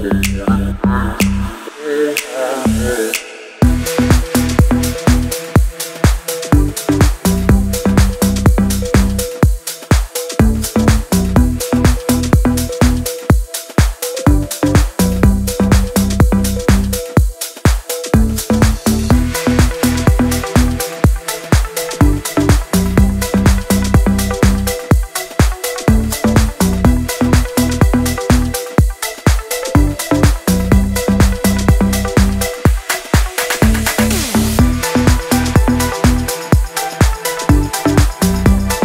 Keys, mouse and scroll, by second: 0.0-0.8 typing, 1.9 typing, 3.1-5.5 typing, 7.3-12.4 typing, 16.1 click, 17.7-20.3 shift+drag, 21.4-23.3 shift+drag, 25.3-28.3 shift+drag, 28.3 scroll down 1, 28.5 scroll up 1, 29.3 click, 31.0 shift+right click, 31.6 click, 32.3 ctrl+a, 33.6 d, 34.1 e, 35.5-38.8 typing.